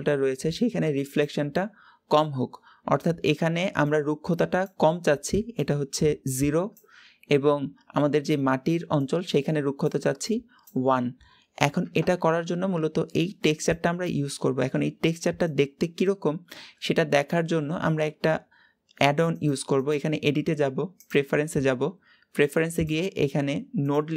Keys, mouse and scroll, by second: 21.1-24.1 drag.